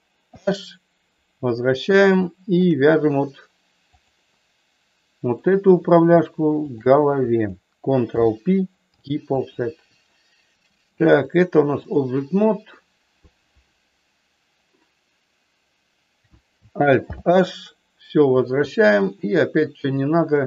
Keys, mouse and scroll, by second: 0.2 alt+h, 2.2 shift+middle click, 3.8 click, 5.2 click, 6.7 shift+click, 8.1 ctrl+p, 11.1 click, 12.7 middle click, 17.1 alt+h, 19.8 click.